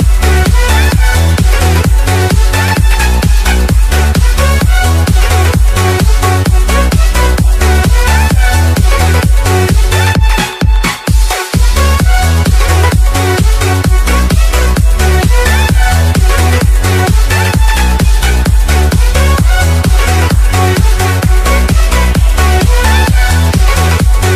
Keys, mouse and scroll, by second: 0.2 click, 0.5-0.9 scroll up 1, 0.9 click, 1.5 n, 1.9 space, 2.3 p, 3.5 Down, 5.0 Return, 6.2 click, 7.1-7.6 scroll down 1, 7.6-8.0 scroll up 1, 8.0 right click, 8.5 click, 8.9 alt+Tab, 9.9 ctrl+v, 11.0 click, 12.9 click, 16.4 Return, 18.8 Left, 19.7 click.